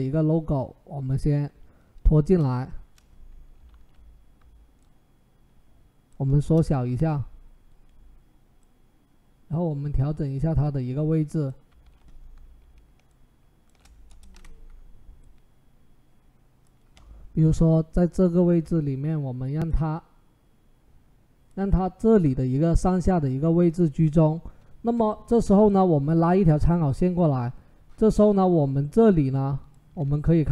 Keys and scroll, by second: 2.0 Return, 3.5 ctrl+t, 6.2 Return, 11.6 ctrl+t, 13.9 Return.